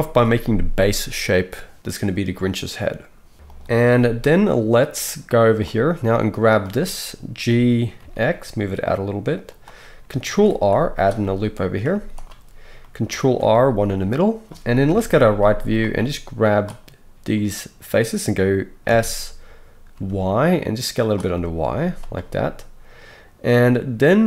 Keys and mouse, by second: 3.5 click, 3.9 z, 4.9-9.6 drag, 7.4 g, 10.2 ctrl+r, 11.2-15.9 middle drag, 11.9 z, 13.2 ctrl+r, 14.8 KP_3, 15.3 z, 15.9-21.1 drag, 18.8 s, 21.1-24.2 middle drag, 21.8 z.